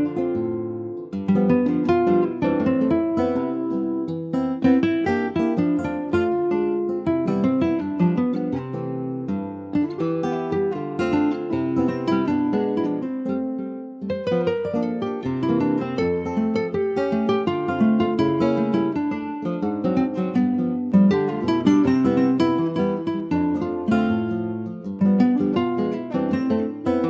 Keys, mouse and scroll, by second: 0.3 s, 2.8 click, 5.0 alt+z, 5.3 alt+middle click, 6.0 shift+middle click, 6.4 scroll up 1, 6.7 ctrl+s, 6.9 scroll up 2, 7.2 middle click, 7.8 shift+scroll up 1, 7.9-10.1 shift+middle drag, 10.1 click, 11.8-12.7 scroll down 1, 12.7-13.7 middle drag, 13.7 s, 18.5 middle click, 19.3 click, 20.8-22.9 middle drag, 22.9-23.4 scroll up 2, 23.4-25.0 shift+middle drag, 25.0 s, 26.5 s.